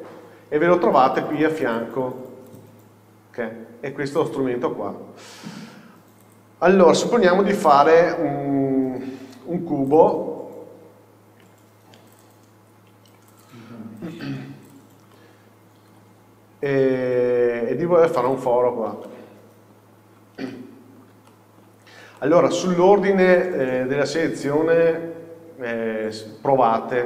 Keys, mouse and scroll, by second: 0.0-2.7 drag, 4.3 click, 5.8 scroll down 1, 6.3 click, 7.6 shift+a, 10.8-11.6 scroll down 1, 11.6 s, 12.3 click, 12.8 s, 13.5 click, 13.7 scroll up 1, 14.2 s, 14.8 click, 16.0 KP_7, 17.1 g, 18.4 click, 18.7-19.2 scroll down 1, 19.2-20.6 middle drag, 20.0-20.6 scroll up 1, 22.0-22.3 scroll down 1, 22.3 middle click, 23.0-23.6 scroll up 2, 23.6 shift+middle click, 24.2-27.0 scroll down 1.